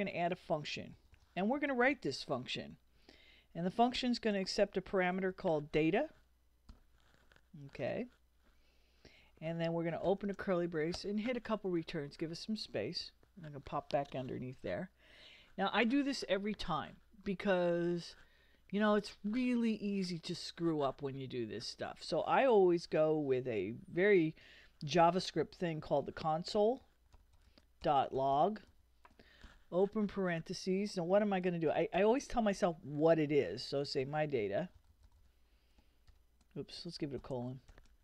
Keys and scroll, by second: 0.3-2.4 typing, 4.0-6.7 typing, 10.0 shift+[, 11.0 shift+Return, 14.0 Up, 25.8-29.4 typing, 31.9 shift+', 33.5-37.7 typing.